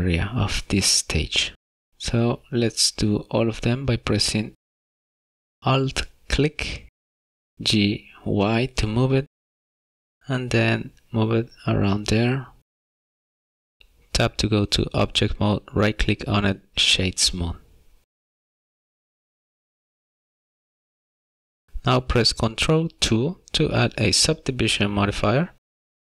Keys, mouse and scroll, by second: 0.7 alt+click, 2.0 g, 5.2 shift+middle click, 8.3 alt+click, 9.3 g, 10.0 alt+click, 10.1 g, 11.0 alt+click, 11.2 g, 11.8 alt+click, 11.9 g, 12.9 middle click, 13.3 scroll down 1, 16.0 Tab, 17.6 right click, 20.5 scroll down 1, 21.0 middle click, 23.1 ctrl+2.